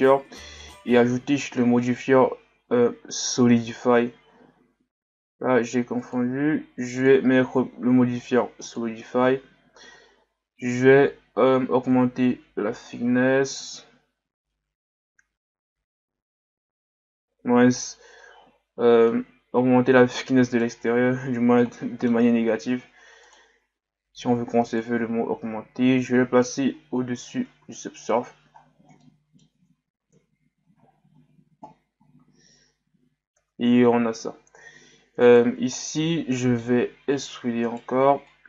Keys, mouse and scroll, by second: 3.6 click, 6.0-7.0 drag, 8.8-10.0 drag, 11.9-14.9 drag, 19.1-20.9 middle drag, 20.9-21.6 scroll down 2, 21.6-23.2 middle drag, 23.2-26.4 drag, 27.6 a, 28.2-28.6 scroll down 1, 29.0-30.1 middle drag, 30.1 KP_1, 30.8-31.5 scroll up 1, 32.0-32.4 scroll down 1, 32.4-32.8 scroll up 1, 33.4 Tab, 34.1 Tab, 35.2 alt+right click, 35.8-37.3 middle drag, 37.3 e, 38.3-38.4 drag.